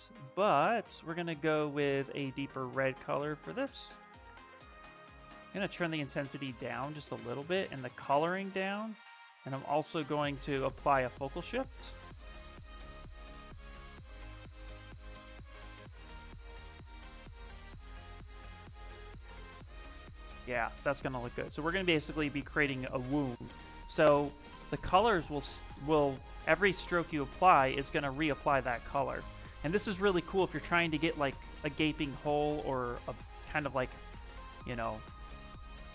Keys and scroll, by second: 3.3 space, 6.8 s, 7.3 space, 11.0 s, 20.1 ctrl+z, 20.6 ctrl+z, 21.3 ctrl+z, 22.5 ctrl+z, 23.0 ctrl+z, 35.4 1.